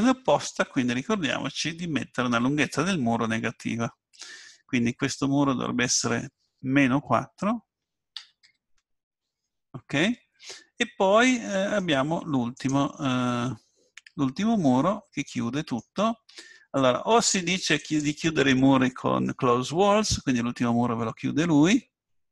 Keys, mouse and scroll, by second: 5.9-7.8 drag, 13.0-15.0 middle drag, 17.8-19.8 drag, 19.8-22.3 middle drag.